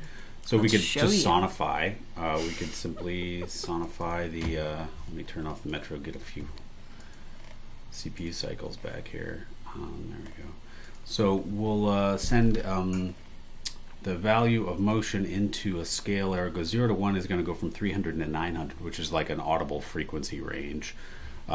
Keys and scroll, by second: 1.0 BackSpace, 2.8 BackSpace, 3.6 super+e.